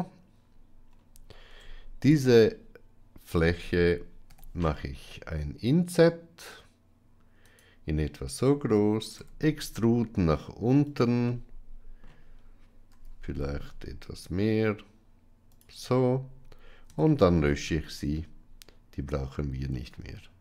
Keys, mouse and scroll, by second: 1.4 Tab, 1.9 click, 4.2 i, 9.1 e, 11.2 middle click, 12.8 g, 16.8 x, 19.7-20.4 middle drag.